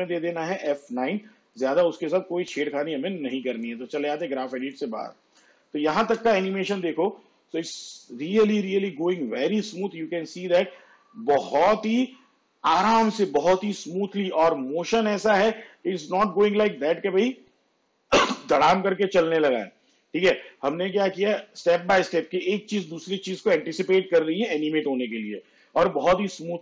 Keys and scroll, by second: 0.7 F9, 5.4 shift+/, 6.1 space, 25.7 space.